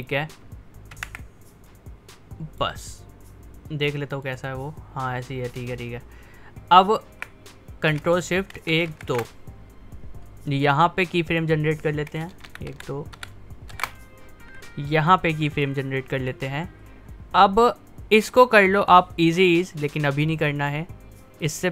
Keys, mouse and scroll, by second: 1.0 ctrl+Right, 1.7-4.3 drag, 8.6 ctrl+shift+Right, 11.3 click, 12.5 ctrl+shift+Left, 15.6-21.7 drag.